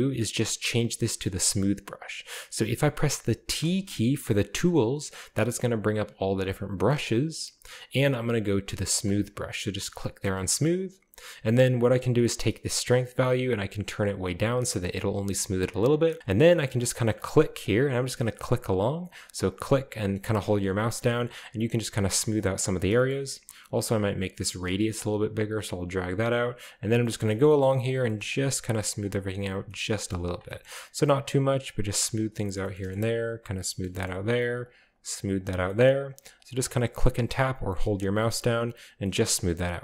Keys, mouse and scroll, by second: 1.3 shift+middle click, 3.6 t, 9.0 click, 10.5 shift+middle click, 10.8-11.5 scroll up 2, 12.9-14.0 drag, 14.5 click, 16.2 click, 16.8 click, 17.0 click, 17.2 click, 17.4 click, 17.6 click, 17.8 click, 18.5 click, 18.6 click, 18.8 click, 19.0 click, 19.3 click, 19.4 click, 19.5 click, 20.1 click, 20.4 click, 20.6 click, 21.3 click, 21.4 click, 21.7 click, 22.4 click, 23.9 click, 25.0 click, 26.0 click, 26.3 click, 26.7 click, 27.1 middle click, 27.1-27.7 scroll down 3, 28.3 shift+click, 28.6 click, 29.0 click, 29.3 click, 30.1-30.8 shift+scroll up 2, 30.3 click, 30.5 middle click, 30.8 click, 31.4 click, 31.7 click, 31.8 click, 32.2 click, 32.6 shift+middle click, 32.8-33.3 scroll up 1, 33.3 click, 33.5 click, 34.4 shift+click, 34.6 shift+click, 34.9 click, 35.4 click, 36.1 click, 36.2 click, 36.6 click, 37.5 click, 37.7 click, 38.0 click, 38.2 click, 38.3 click, 38.4 click, 38.6 click, 38.9-39.2 scroll down 1, 39.7 scroll down 1.